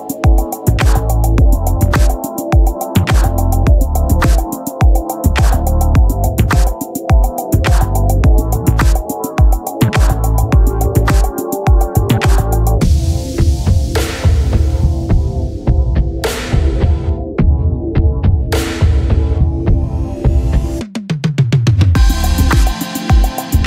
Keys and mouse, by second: 2.5 click, 8.5 click, 15.8 Return, 19.9 click.